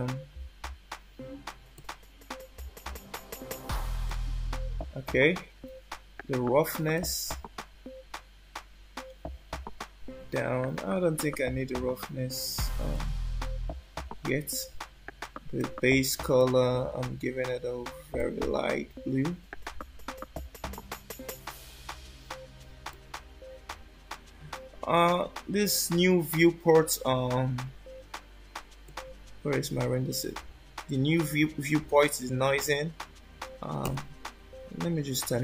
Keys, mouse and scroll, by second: 1.7 middle click, 4.0 middle click, 6.9 click, 11.0 scroll down 2, 11.8 scroll down 1, 12.9 middle click, 15.5 click, 16.3 click, 22.9 middle click, 25.5 scroll up 1, 28.8 click, 33.8 click.